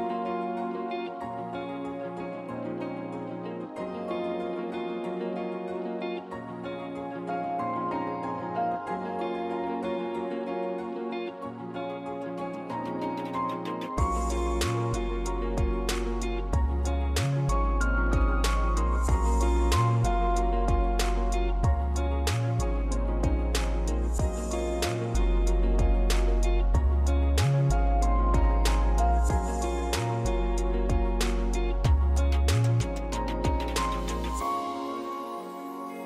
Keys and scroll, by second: 26.3 ctrl+c, 26.9 u, 28.2 Tab, 28.3-29.5 typing, 30.4 ctrl+v, 30.9 Tab, 31.2-32.8 typing, 33.9-36.0 typing, 34.8 Tab.